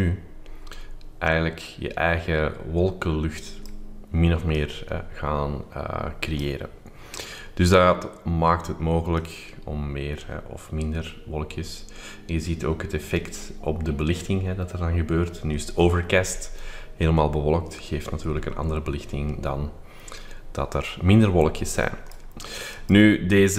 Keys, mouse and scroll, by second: 4.5-7.1 drag, 9.1-22.4 drag, 22.8 click.